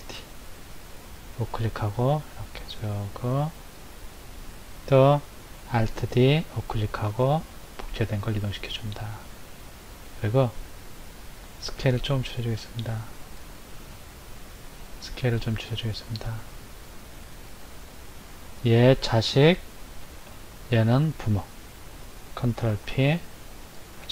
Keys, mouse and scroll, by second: 0.0 alt+d, 2.1 click, 6.0 alt+d, 7.6 click, 10.2 click, 11.9 s, 14.0 click, 14.6 s, 17.7 click, 18.5 click, 20.3 shift+click, 22.6 ctrl+p.